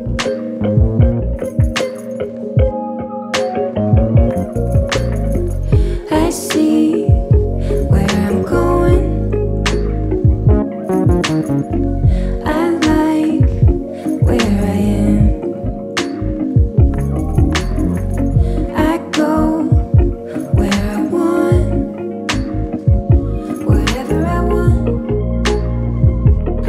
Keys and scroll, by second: 7.1 ctrl+-, 14.3 space, 15.3 ctrl+=, 15.5 ctrl+=, 21.5 ctrl+-, 22.1 space, 24.6 Delete.